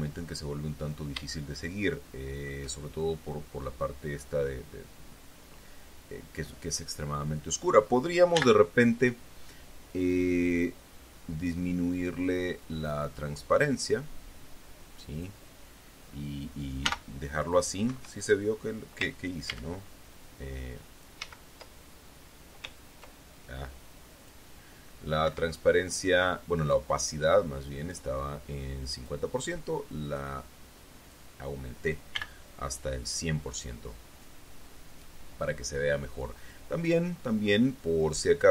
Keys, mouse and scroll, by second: 0.6-0.9 shift+scroll up 3, 1.7-3.0 shift+middle drag, 8.7 n, 13.0-15.8 drag, 17.2 m, 18.3 Escape, 19.9 ctrl+a, 21.6 ctrl+z, 24.6 click, 25.6 Escape, 26.0-29.6 drag, 30.3-31.7 drag, 32.5 n, 37.2 click.